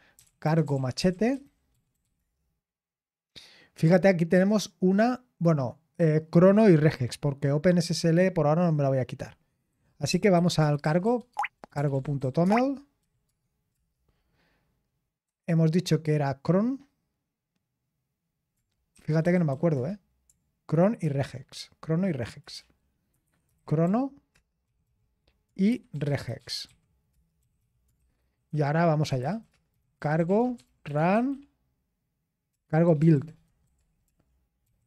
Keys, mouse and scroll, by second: 0.0-2.6 typing, 11.7-13.5 typing, 13.7 Return, 15.0-16.9 typing, 18.3-19.7 typing, 21.0 typing, 22.4-34.8 typing.